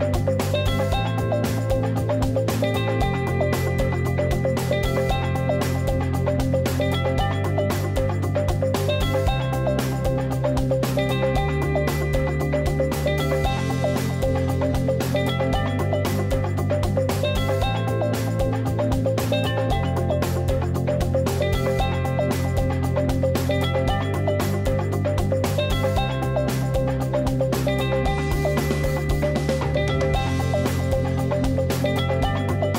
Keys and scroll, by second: 1.8 super+z, 6.4 super+t, 6.5 super+space, 9.7 super+z, 11.3 super+t, 13.0 super+z, 15.3 super+z, 23.0 super+t, 26.9 super+d, 29.1 shift+super+i, 29.2 shift+super+BackSpace, 31.4 super+BackSpace, 31.7 super+d.